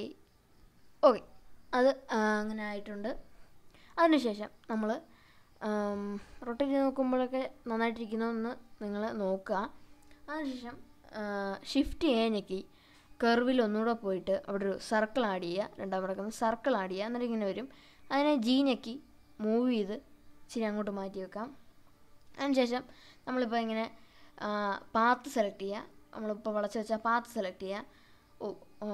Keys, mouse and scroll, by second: 0.2 Tab, 1.1 scroll down 2, 1.8-5.0 middle drag, 5.6-6.8 shift+middle drag, 7.0-8.0 scroll down 3, 7.6-9.2 middle drag, 9.4-10.2 middle drag, 11.8 shift+a, 15.9-18.0 middle drag, 20.4 g, 21.8 click, 24.2 click, 25.7-28.9 drag.